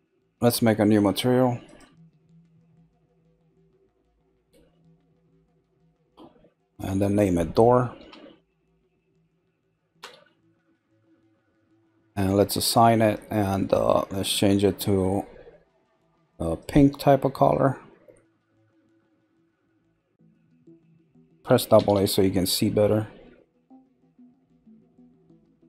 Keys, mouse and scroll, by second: 1.7 click, 5.1 click, 6.5 click, 6.7-8.6 drag, 12.7 click, 14.1 click, 21.8 a, 22.0 a, 23.7 click.